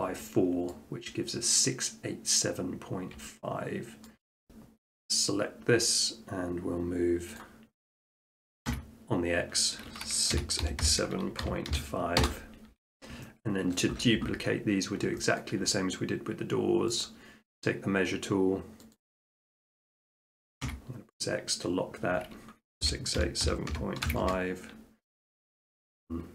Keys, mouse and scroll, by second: 0.0 shift+middle click, 0.7 middle click, 2.9 middle click, 3.0 middle click, 3.3 scroll, 4.1 shift+middle click, 7.4 click, 8.7 x, 10.3-12.2 typing, 13.8 shift+middle click, 14.7 middle click, 14.8 middle click, 14.9 shift+middle click, 15.4 shift+middle click, 15.5 shift+middle click, 16.6 middle click, 17.0-18.1 drag, 19.0-20.1 drag, 20.6 x, 22.9-24.1 typing, 24.3 Return.